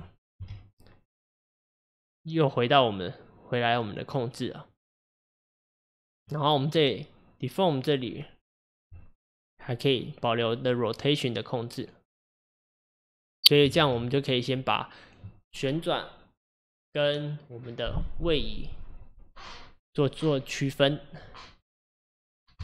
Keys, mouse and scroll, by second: 0.4 g, 6.2 click, 6.7 click, 8.9 click, 13.9 ctrl+z.